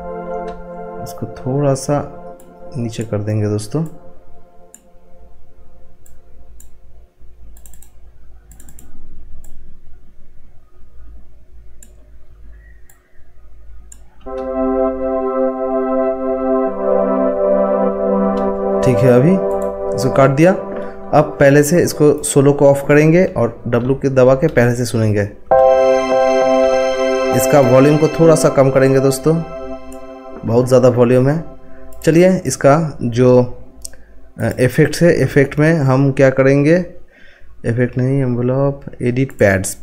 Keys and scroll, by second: 23.7 w.